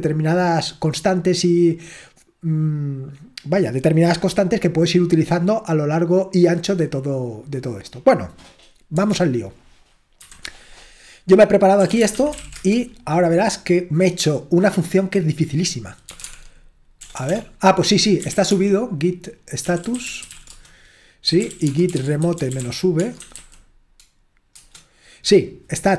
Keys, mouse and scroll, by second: 5.3-7.0 scroll down 1, 10.2 super+7, 11.8-12.9 typing, 16.0-24.5 typing.